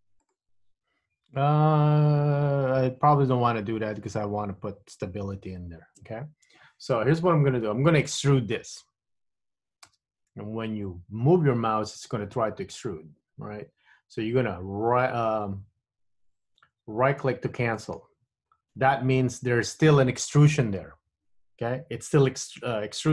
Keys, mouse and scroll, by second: 0.4 alt+shift+click, 10.0 e.